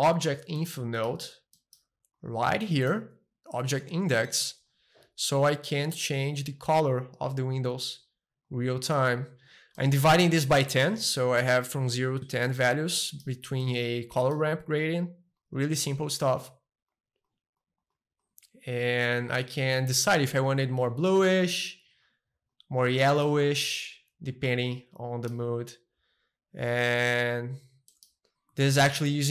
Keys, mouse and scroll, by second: 0.1 `, 0.6-2.1 middle drag, 2.1 click, 2.6-4.6 middle drag, 5.4-6.6 middle drag, 6.6-8.6 drag, 8.9 click, 9.7-11.8 middle drag, 12.6 click, 13.1-15.2 middle drag, 15.4-17.5 drag, 17.6-19.9 drag, 19.9-21.1 middle drag, 21.1-23.1 drag, 23.3-25.3 middle drag, 26.7-28.4 drag, 27.0-28.4 right drag, 28.4 middle click, 28.6 a, 28.8 middle click, 29.1-29.3 shift+middle drag.